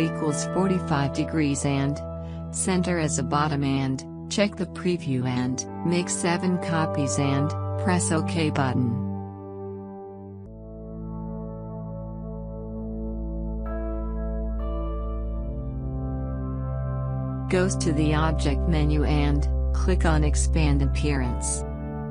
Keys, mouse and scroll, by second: 3.9 click, 7.8-11.3 scroll up 1, 13.5 click, 18.8 click.